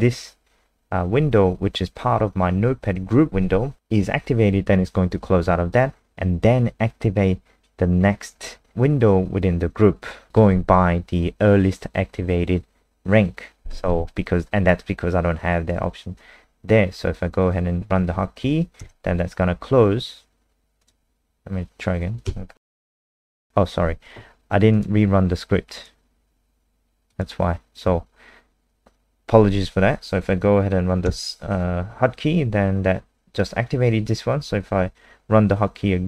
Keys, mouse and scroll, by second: 20.8 click, 22.2 KP_0, 24.7 click, 31.1 KP_0.